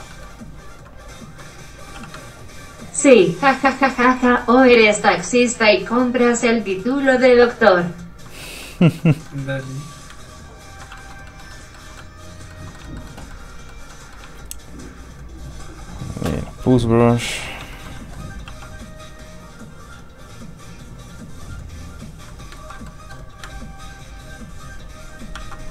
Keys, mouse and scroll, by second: 2.0 ctrl+shift+f, 2.1 click, 3.5 ctrl+middle click, 3.6 middle click, 4.1 alt+shift+middle click, 5.3 alt+shift+scroll up 1, 5.4 middle click, 5.9 ctrl+click, 6.9 click, 7.0 middle click, 7.3 f, 7.4 click, 7.5 ctrl+click, 8.5 ctrl+middle click, 8.6 middle click, 9.2 shift+middle click, 9.4 middle click, 9.7-10.1 scroll up 1, 10.2 ctrl+click, 10.9 shift+click, 11.0 shift+middle click, 11.2 scroll down 1, 11.3 middle click, 11.5 shift+middle click, 12.0 middle click, 12.1 middle click, 13.1 middle click, 14.4 shift+space, 16.5 space, 16.6 f, 16.8 click, 17.1 f, 17.5 click, 17.8 shift+middle click, 17.9 scroll down 1, 18.0 middle click, 18.5 f, 18.6 click, 19.4 click, 22.6 ctrl+z, 22.9 middle click, 23.0 middle click, 23.7 ctrl+click, 25.4 ctrl+z.